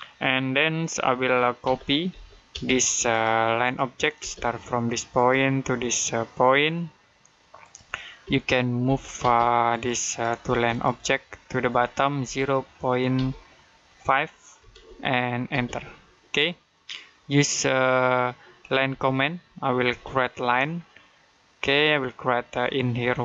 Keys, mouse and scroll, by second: 1.5-2.4 typing, 2.9 click, 4.0 space, 5.0 click, 8.1 space, 8.7 m, 9.0 space, 9.5 click, 10.3 space, 10.5 click, 12.0 typing, 14.2-15.3 typing, 18.7 l, 19.7 space, 20.1 middle click.